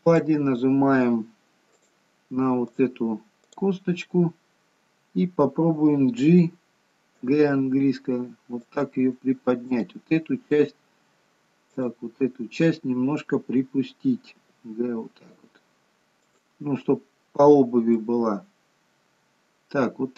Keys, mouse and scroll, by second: 0.1 click, 1.9 click, 2.7 click, 3.5 click, 9.8 click, 11.8 click, 14.3 g, 17.9 middle click.